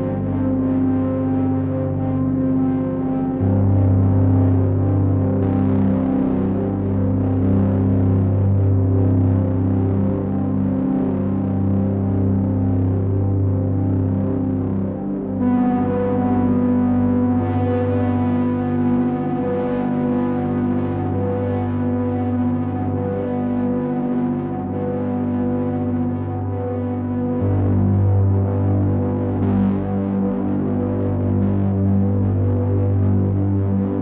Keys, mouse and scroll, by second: 0.9 alt+f, 7.8 click, 9.9 shift+click, 11.3 shift+click, 14.3 alt+f, 16.4 alt+f, 19.4 click, 20.7 middle click, 26.5 click, 27.8 Return, 28.3-33.4 typing.